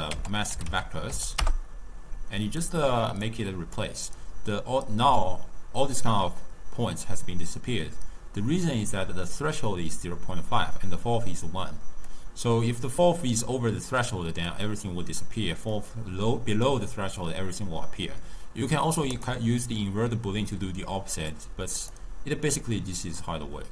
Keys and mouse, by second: 3.3-5.1 drag, 5.1-7.9 d, 8.9 d, 12.1-15.2 drag, 15.8-18.9 drag, 19.2 click, 19.9-22.0 drag, 22.7-23.7 drag.